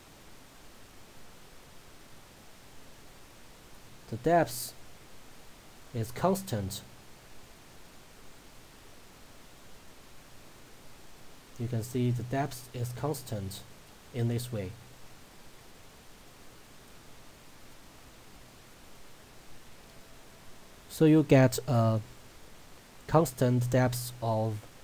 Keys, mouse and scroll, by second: 2.7-3.9 middle drag, 4.2 scroll up 1, 5.2-6.5 middle drag, 13.3-14.2 shift+middle drag, 18.1-18.5 scroll down 1, 18.6-19.2 shift+middle click, 19.3 scroll down 1.